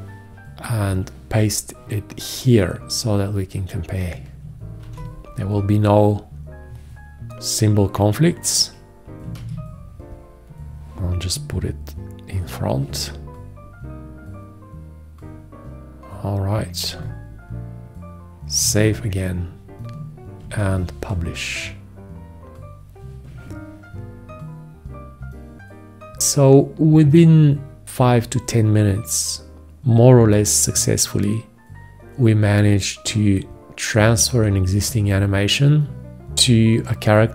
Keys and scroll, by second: 5.1 ctrl+v, 9.6 ctrl+a, 18.9 ctrl+s, 20.7 ctrl+Return.